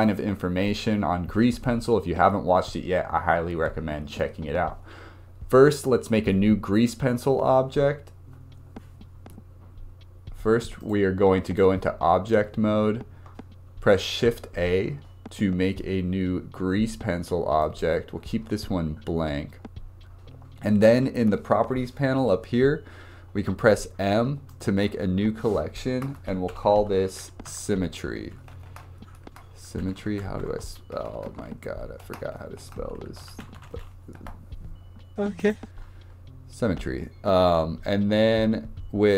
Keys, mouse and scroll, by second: 10.8-14.0 drag, 14.1 shift+a, 23.5 m, 26.7 m, 28.7 BackSpace, 28.9 BackSpace, 30.6 r, 31.1 BackSpace, 36.2-36.9 scroll down 2.